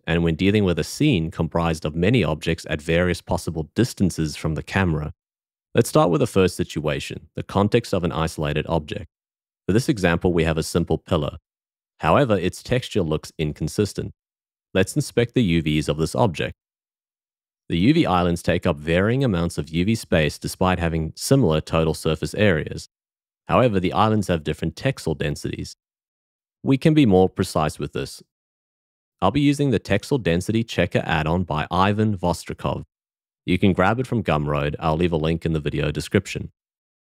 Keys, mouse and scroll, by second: 3.3 q, 19.7 a.